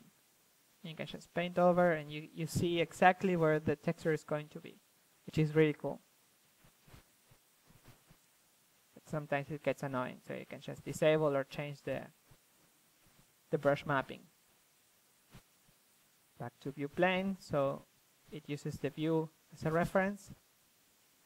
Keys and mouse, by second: 4.6-6.6 drag, 6.2 f, 7.6 ctrl+f, 8.5-11.3 drag, 11.3 ctrl+z, 11.6 click, 12.6 middle click, 13.1 ctrl+z, 13.7-16.1 drag, 18.2-21.2 middle drag.